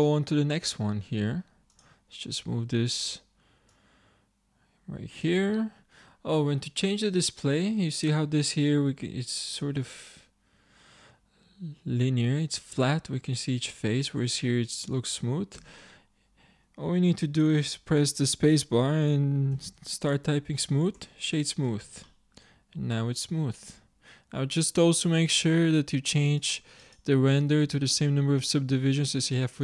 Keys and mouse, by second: 0.2 middle click, 2.6 middle click, 4.0-5.3 middle drag, 5.3 click, 6.3-9.4 middle drag, 13.8-18.8 middle drag, 15.6 space, 20.0 o, 22.1-25.9 middle drag, 26.4-28.6 drag.